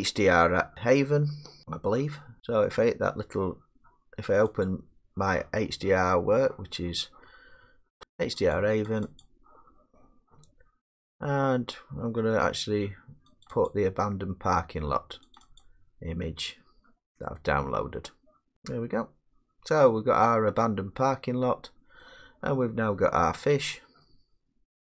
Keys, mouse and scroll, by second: 1.6-4.7 middle drag, 4.7-5.8 drag, 8.0 typing, 8.6 click, 9.0 click, 9.2 click, 13.5 click, 13.7 click, 15.4 click, 15.6 click, 18.4 click, 20.5-21.2 scroll, 21.6 middle click, 22.1 middle click, 22.4-22.8 scroll, 22.9 scroll down 4, 23.6 middle click, 23.7-24.0 scroll.